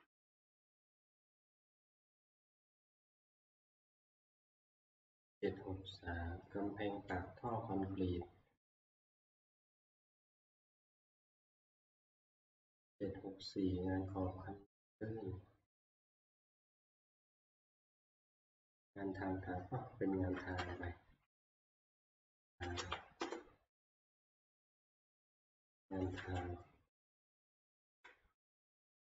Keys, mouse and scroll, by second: 7.6 scroll down 3, 8.5-12.5 scroll down 18, 8.7-10.9 middle drag, 12.5-13.9 scroll up 10, 13.9 scroll, 16.5 scroll, 17.2 scroll, 19.5 scroll, 20.7 scroll down 6, 21.9-23.3 typing, 26.0 shift+F2, 26.0 Up, 26.0 typing, 27.3 Escape, 27.6 Left, 27.9 Left.